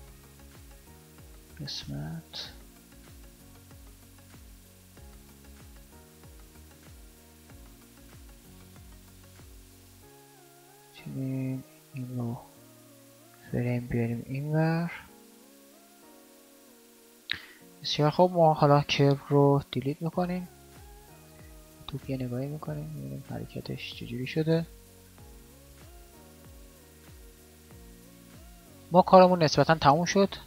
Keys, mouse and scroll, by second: 7.6 alt+a, 10.0 alt+a, 21.1 a, 28.7 a.